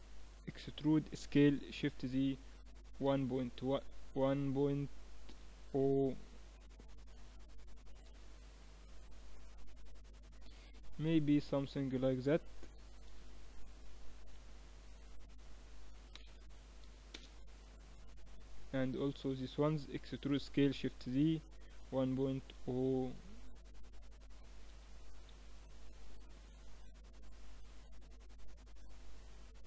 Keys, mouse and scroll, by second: 0.6 e, 18.2 a, 18.7-21.4 right drag, 20.0 e, 21.7 e.